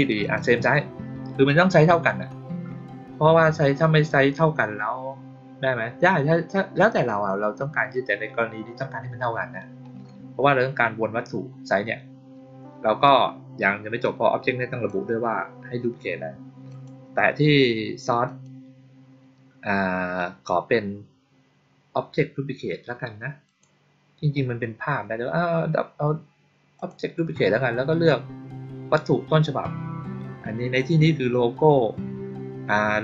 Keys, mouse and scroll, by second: 0.1 click, 13.9 click, 16.6 click, 18.2 click, 23.4 click, 26.7 click.